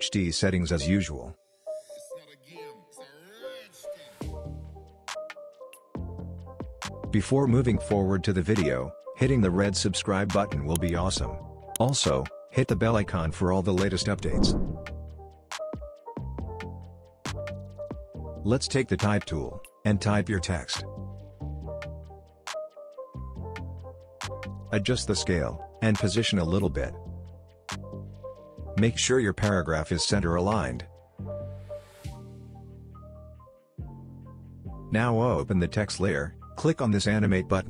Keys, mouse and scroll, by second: 3.6-5.4 typing, 6.2 Return, 7.3 scroll down 1, 15.1-16.9 scroll up 1, 17.7 scroll up 1, 17.8-19.0 drag, 20.7-22.8 typing, 24.0 click, 29.2-30.8 scroll down 1, 32.5-34.1 scroll up 1, 34.1-34.5 scroll down 1, 34.5-34.9 scroll up 1, 34.9-37.6 drag.